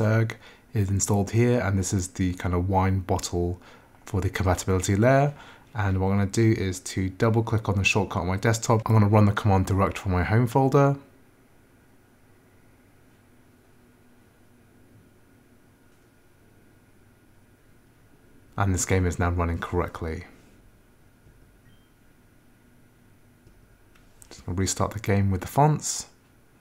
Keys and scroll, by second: 20.6 Return.